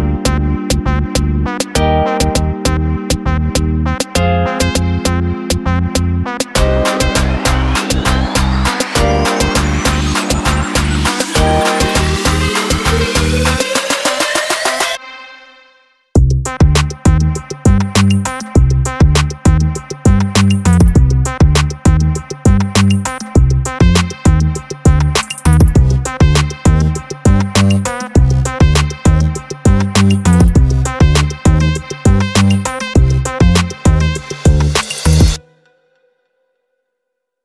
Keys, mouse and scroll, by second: 2.5 click, 4.5 click, 4.8 click, 6.7 click, 7.2 click, 9.0 click, 13.6 click, 14.6 click, 15.0 click, 15.3 click, 16.9 click, 17.0 click, 17.6 click, 17.9 click, 18.5 click, 18.8 click, 19.1 click, 19.9 click, 20.9 click, 21.1 click, 21.2 click, 21.4 click, 22.5 click, 27.1 click, 28.2 click, 28.6 click, 29.0 click, 30.9 click, 31.4 click, 31.8 click, 32.2 click, 32.6 click, 32.9 click, 33.8 click, 34.1 click, 34.5 click, 34.9 click, 35.1 click, 35.3 click, 36.0 click, 36.2 click, 36.6 click, 36.8 click, 37.1 click, 37.3 click.